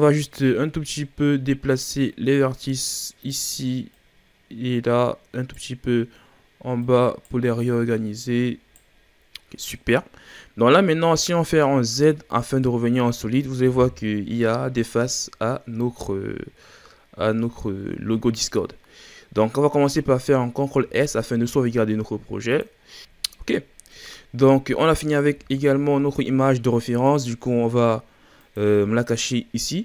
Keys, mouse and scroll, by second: 0.5 scroll down 1, 0.7-1.5 shift+scroll up 2, 1.8 right click, 4.0 right click, 6.7 right click, 7.7 right click, 9.3-11.9 middle drag, 11.9 z, 13.7 KP_1, 15.4-16.0 scroll down 2, 16.0-17.5 scroll up 2, 20.7 ctrl+s, 23.5-23.9 scroll down 1, 23.9-25.2 middle drag, 25.2 KP_1, 28.3 click.